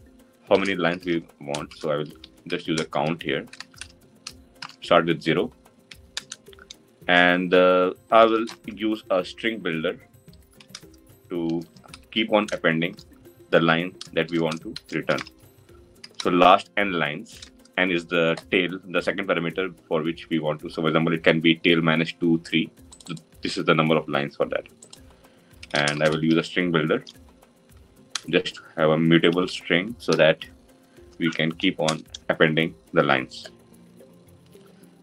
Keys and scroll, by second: 27.9 Return.